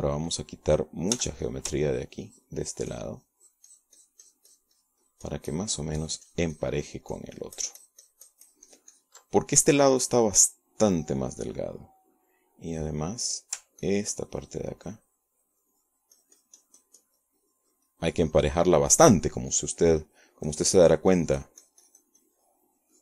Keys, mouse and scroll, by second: 3.1 f, 3.3 ctrl+click, 3.7-11.1 ctrl+drag, 11.6-14.5 middle drag, 14.6 middle click, 15.7-23.0 ctrl+drag.